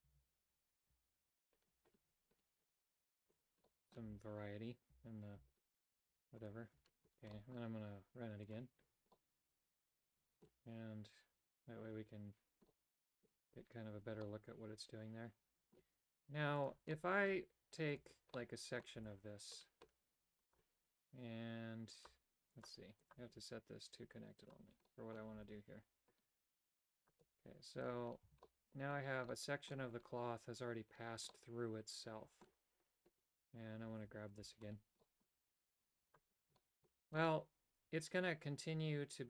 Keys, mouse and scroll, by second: 0.0 alt+h, 0.9 g, 3.6 middle click, 4.0 a, 6.4 alt+right click, 7.3 middle click, 8.6 click, 9.2-10.5 middle drag, 12.8 middle click, 14.3-15.9 middle drag, 16.7 click, 16.9 middle click, 17.9 right click, 18.3 middle click, 19.0 g, 21.9 click, 22.5 click, 23.0-24.9 drag, 24.9 middle click, 25.4 g, 27.2 middle click, 28.3 a, 28.5 middle click, 29.3 middle click, 31.3-32.5 middle drag, 34.3 alt+right click, 35.0 middle click, 36.1 click, 36.6 shift+middle click, 37.4-39.2 middle drag.